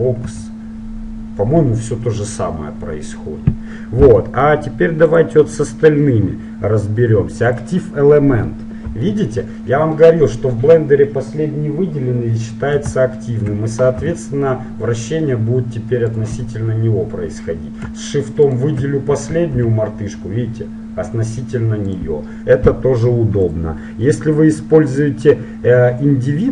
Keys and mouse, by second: 0.5 r, 5.1-7.1 drag, 8.7-10.4 middle drag, 14.2 r, 18.5-20.3 right drag, 19.7 r, 23.5-25.3 drag.